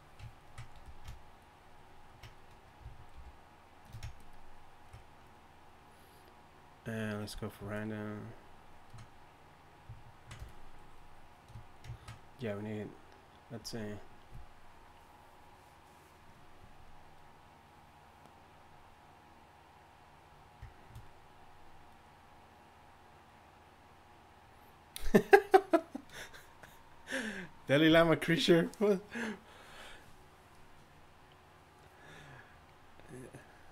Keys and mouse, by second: 0.8 f, 3.2 shift+f, 3.9 shift+f.